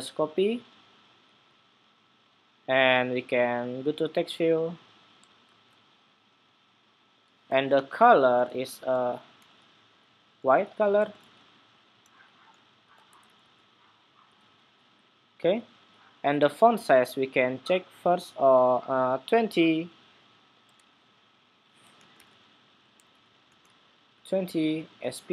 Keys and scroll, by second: 5.2 super+v.